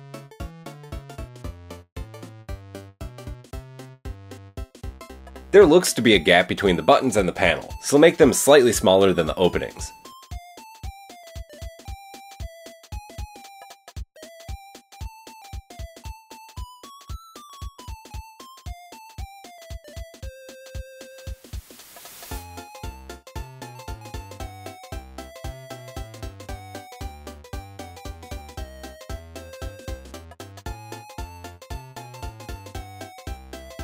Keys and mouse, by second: 0.0-1.4 drag, 1.7 f, 2.3 Tab, 2.7 a, 3.3 f, 3.9-5.6 drag, 4.7 KP_1, 7.5 s, 11.5 s, 15.6-17.5 drag, 17.8-19.2 drag, 18.4 Tab, 19.8 Tab, 20.3 KP_1, 21.5 shift+d, 21.9 g, 25.1 a, 25.8-28.4 middle drag, 26.6 g, 28.3 e, 28.6 g, 31.2 middle drag, 31.6 a, 32.0 g.